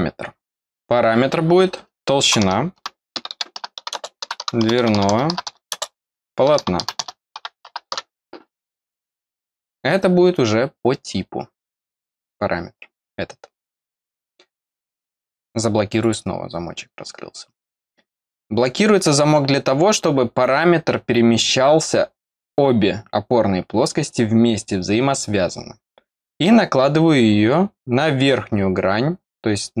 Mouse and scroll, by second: 13.6 click, 15.9 click, 18.3-29.8 drag, 28.6-29.6 scroll down 1.